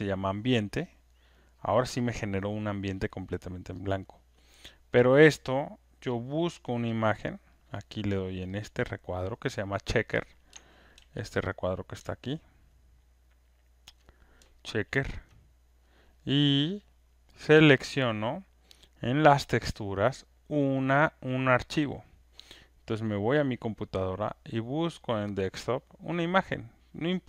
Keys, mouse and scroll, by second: 3.9 click, 8.6 click, 9.8 click, 10.9 ctrl+F1, 11.6 click, 13.9 ctrl+click, 14.9 ctrl+F1, 15.8 click, 21.6 click, 23.3 click, 25.1 click.